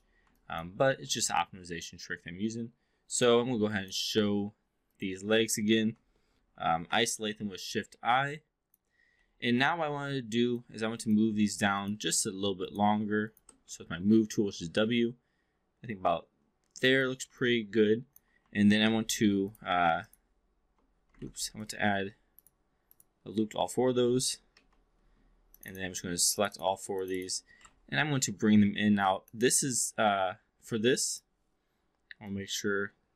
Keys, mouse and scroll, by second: 0.3 alt+click, 0.7 3, 1.0 4, 3.0 click, 3.7 alt+click, 6.4 shift+i, 7.6 alt+middle drag, 8.2-8.8 alt+drag, 9.1 alt+middle drag, 9.5-10.6 alt+drag, 10.7 3, 11.7 shift+click, 12.5 shift+click, 13.6 w, 15.0-17.1 drag, 17.3-18.2 alt+drag, 18.7 alt+c, 19.3 click, 21.1 ctrl+z, 21.5 click, 22.3 click, 22.8 click, 23.7 2, 24.5 q, 25.4 shift+click, 25.7 shift+drag, 26.3 shift+click, 26.5 shift+click, 27.0 shift+click, 27.2 shift+click, 27.5 e, 27.6 r, 29.3-31.2 drag, 32.1-33.1 drag.